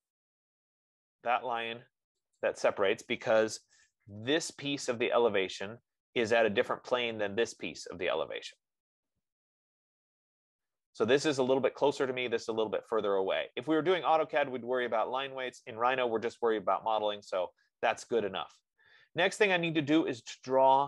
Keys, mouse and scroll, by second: 0.3 click, 2.8 click, 3.8 Return, 7.2 F15.